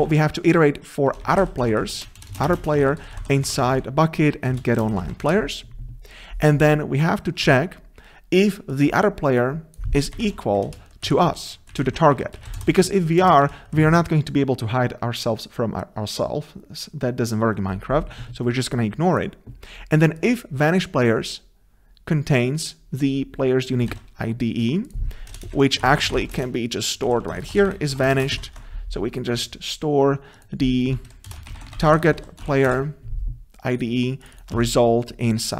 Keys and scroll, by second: 4.5 Return, 11.1 Delete, 23.9 ctrl+c, 25.3 ctrl+c, 28.4 ctrl+v, 31.3 ctrl+v, 32.7 ctrl+BackSpace, 34.5 Return.